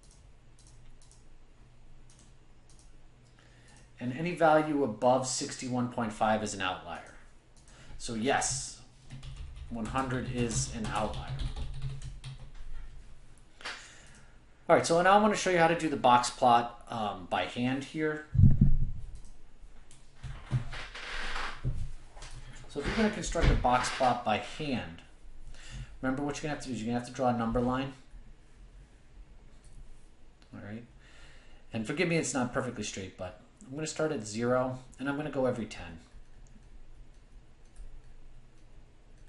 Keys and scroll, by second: 0.4-1.2 typing.